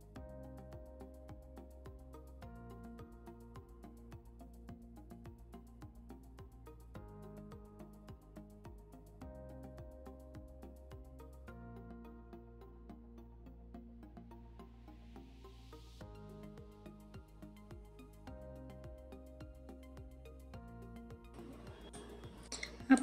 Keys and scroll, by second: 1.3 ctrl+z, 1.6 ctrl+z, 2.9 ctrl+z, 4.0 ctrl+z, 5.2 3, 9.0 3, 11.0 3, 12.5 ctrl+z, 15.6 3, 18.2 3, 19.1 ctrl+l.